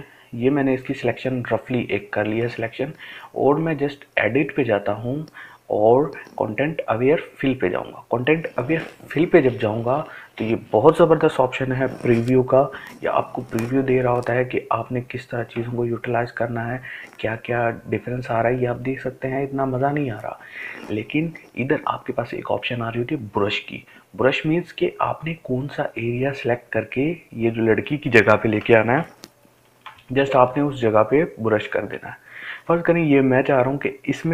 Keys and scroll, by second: 27.7 ctrl+space.